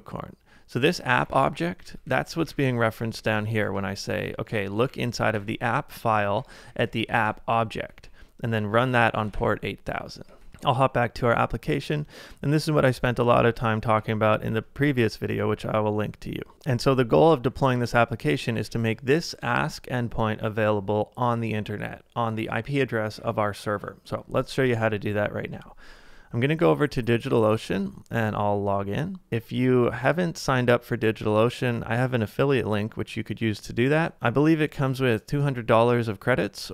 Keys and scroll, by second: 0.9-4.4 typing, 6.1-10.5 typing, 7.9 ctrl+c, 10.5 ctrl+c, 12.9 ctrl+d, 14.3 ctrl+d, 16.5 shift+[, 18.6 shift+v, 19.2 shift+], 24.7 super+Tab.